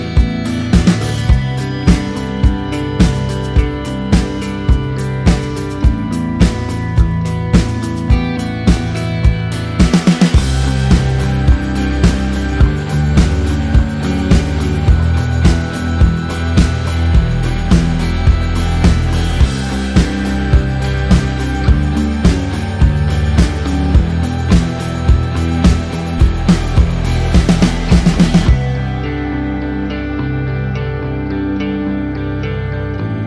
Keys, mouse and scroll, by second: 1.8 click, 6.8 KP_Enter, 9.6 click, 13.3 click, 14.6 Return, 14.9 ctrl+t, 15.8 alt+click, 17.5 Return, 18.0 click, 19.6 ctrl+t, 20.0 click, 20.8 Return, 21.5 alt+click, 23.0 ctrl+t, 23.7 click, 24.7 Return, 25.2 click, 33.1 click.